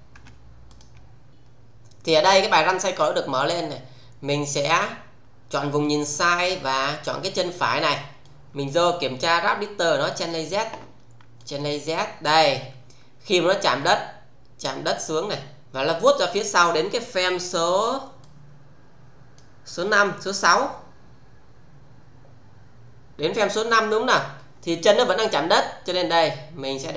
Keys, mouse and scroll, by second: 0.1 Tab, 0.6 click, 3.4 click, 4.6 click, 5.8 click, 6.6 alt+right click, 8.3-8.8 click, 10.1 click, 11.3 click, 13.8-16.8 click, 18.2-19.5 click, 20.5-23.9 click, 25.8-26.9 click.